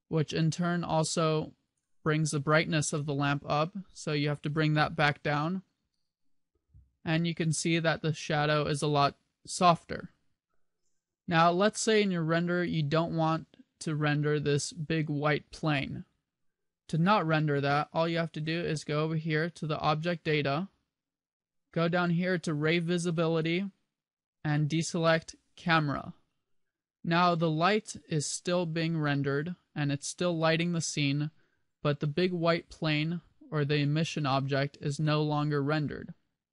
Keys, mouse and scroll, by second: 1.8 click, 20.0 click, 23.4 click, 25.8 click.